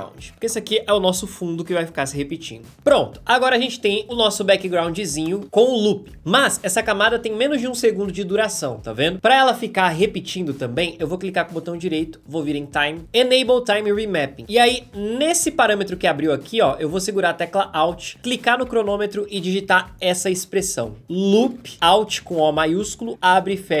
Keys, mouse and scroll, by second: 5.2 space, 6.9 space, 18.2-21.0 alt+drag, 21.0-23.5 typing.